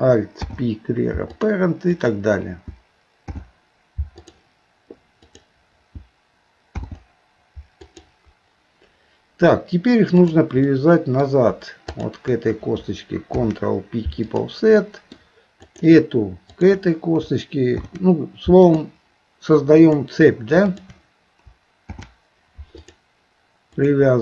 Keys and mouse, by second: 0.4 alt+p, 2.0 click, 3.2 alt+p, 5.2 click, 6.7 alt+p, 10.2 click, 10.7 middle click, 12.0 shift+click, 13.3 ctrl+p, 14.8 middle click, 15.7 click, 16.6 shift+click, 17.7 ctrl+p, 20.7 shift+click, 21.9 ctrl+p, 23.7 click.